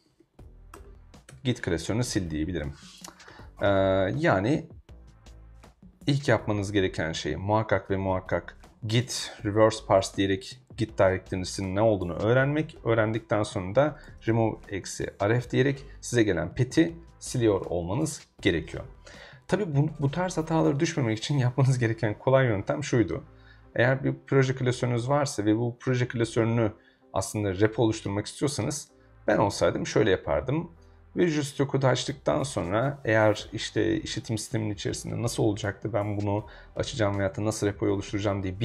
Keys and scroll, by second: 0.0-0.7 typing, 0.7 Tab, 1.3 Return, 12.6 super+Tab, 13.7-15.7 typing.